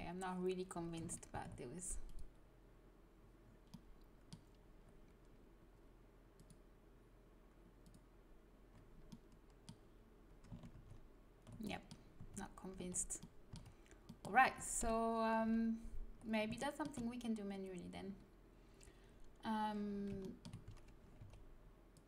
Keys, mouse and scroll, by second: 1.2 ctrl+z, 2.0 click, 6.3-8.0 drag, 10.7 ctrl+z, 12.2 a, 12.7 z, 14.7 KP_1, 15.5 z, 19.8-20.1 scroll up 1, 20.1 middle click, 21.1 c.